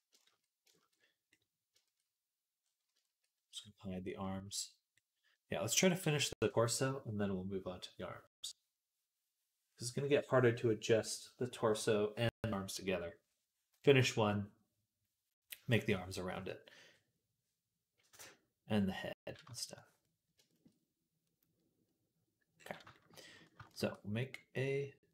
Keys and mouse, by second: 0.9 right click, 1.6-4.8 shift+middle drag, 4.8-19.8 drag, 22.4-25.1 shift+drag, 23.6 shift+a.